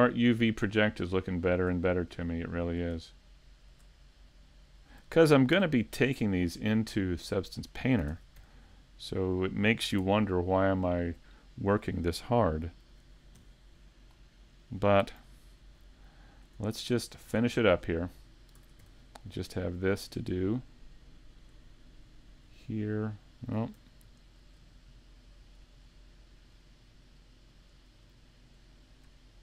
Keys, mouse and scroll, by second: 0.3 shift+right click, 0.7 middle click, 2.7 shift+right click, 3.1 middle click, 4.7 shift+right click, 5.5 ctrl+e, 6.7 middle click, 8.1 ctrl+Tab, 9.1 middle click, 11.0 alt+right click, 11.4 middle click, 13.4 u, 15.2 a, 15.5-16.0 scroll down 2, 15.9 shift+middle click, 17.4 shift+middle click, 17.8 scroll up 1, 18.6 scroll up 3, 18.6 ctrl+Tab, 20.2 right click, 20.6 middle click, 22.4 shift+right click, 23.8 super+z, 24.3 shift+right click, 24.7 middle click, 25.9 shift+middle click, 28.1 middle click.